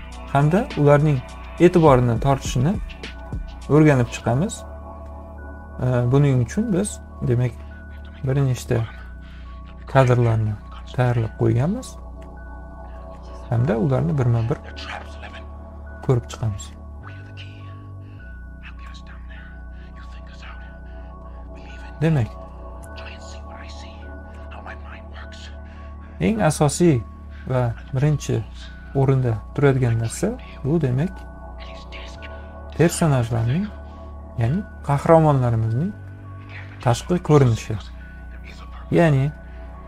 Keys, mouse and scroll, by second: 8.0 ctrl+click, 9.1 ctrl+click, 9.5 ctrl+click, 10.1 ctrl+click, 15.0 ., 15.8 ., 16.7 ., 17.9 ,, 18.2 ,, 18.7 ,, 22.3-24.0 drag.